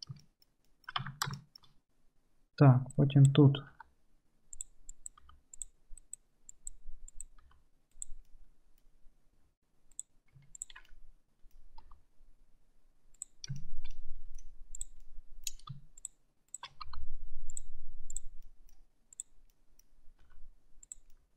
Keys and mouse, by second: 1.1 Tab, 2.9 middle click, 3.7 g, 4.8 click, 5.3 g, 5.8 click, 7.5 g, 8.7-14.0 right drag, 10.0 click, 10.0 middle click, 10.7 ctrl+click, 10.7 ctrl+middle click, 11.9 g, 14.0 click, 14.4-15.8 right drag, 15.8 shift+click, 16.5 shift+middle click, 16.7 shift+click, 16.7-18.2 right drag, 16.9 g, 18.2-19.3 middle drag, 19.3-21.3 right drag, 20.3 g, 21.2 click.